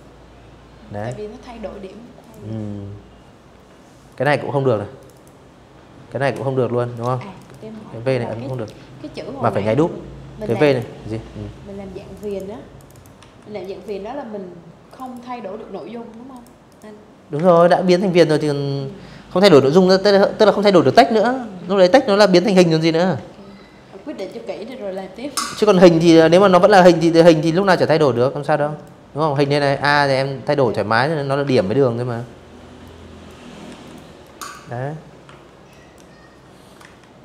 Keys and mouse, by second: 1.7 click, 2.7 click, 2.8 click, 4.6 click, 5.1 click, 6.2 alt+click, 8.0 click, 8.2 click, 8.3 click, 9.8 click, 9.9 click, 10.5 click, 10.6 click, 10.8 v, 11.3 click, 12.5 click, 12.7 click, 14.0 click, 14.3 click, 15.0 space, 15.1 click, 15.3 v, 15.7 click, 17.3 click, 21.8 click, 22.4 click, 23.3 click, 23.8 click, 24.6 a, 25.3 click, 25.8 click, 27.1 ctrl+z, 27.4 a, 28.4 click, 29.2 ctrl+z, 30.5 click, 31.4 v, 31.5 click, 31.9 click, 32.9 Delete, 33.3 click, 34.5 z.